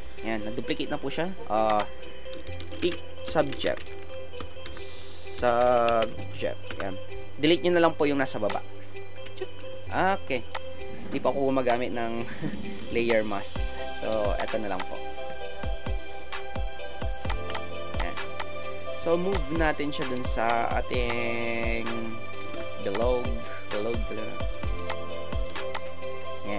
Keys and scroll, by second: 2.8-6.0 typing, 6.7 Return, 9.3 Delete, 12.9 ctrl+alt+space.